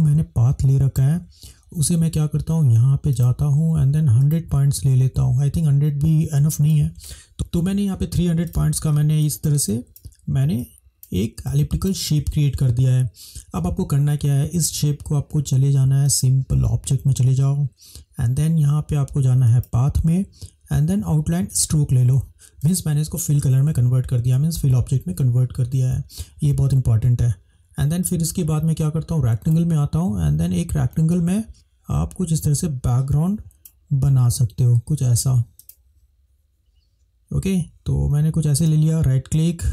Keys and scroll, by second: 9.1 space.